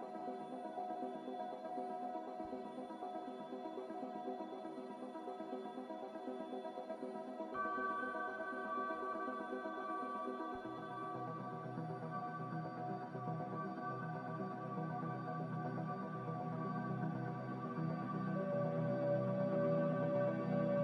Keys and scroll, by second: 3.6 ctrl+z, 4.6 ctrl+z, 5.1 ctrl+z, 5.6 ctrl+z, 9.6 z, 12.9 ctrl+z, 16.2 z.